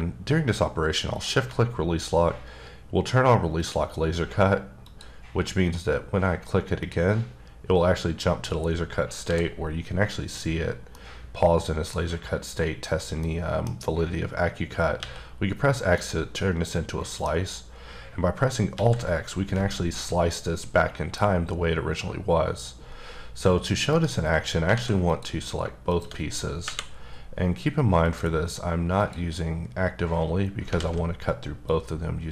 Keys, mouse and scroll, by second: 1.1 shift+click, 4.8 click, 6.8 click, 9.2 h, 10.9 middle click, 13.3 middle click, 13.8-15.0 scroll up 1, 15.0 x, 15.9 middle click, 18.7 x, 23.9 right click, 24.7 alt+a, 25.1 click, 26.6 KP_1, 28.0 click, 28.9 click, 30.7 alt+z, 31.6 click.